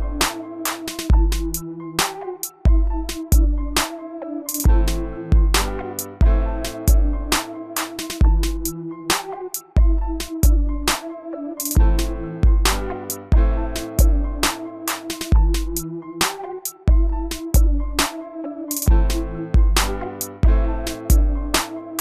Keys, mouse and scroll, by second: 3.9-5.6 middle drag, 6.4 click, 7.4-8.4 typing, 9.6 scroll down 1, 10.6 middle click, 13.0 click, 15.5 scroll down 1, 16.2 click, 16.8-21.0 middle drag, 21.0 scroll up 1, 21.6 middle click.